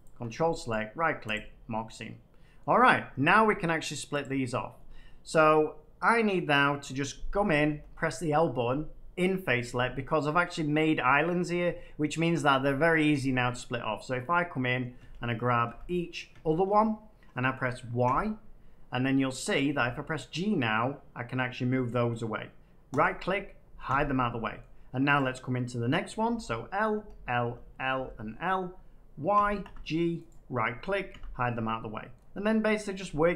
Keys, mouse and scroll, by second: 0.0 ctrl+click, 0.6 right click, 1.3 click, 1.6 middle click, 1.8 scroll down 5, 2.5 middle click, 4.1 click, 5.0 click, 7.6 l, 14.9 l, 15.6 l, 16.3 l, 18.0 y, 19.7 g, 22.9 right click, 23.8 h, 24.5 middle click, 25.1 click, 26.2 l, 26.9 l, 27.3 l, 27.9 l, 29.3 y, 29.5 g, 30.2 right click, 31.1 h, 32.1 middle click.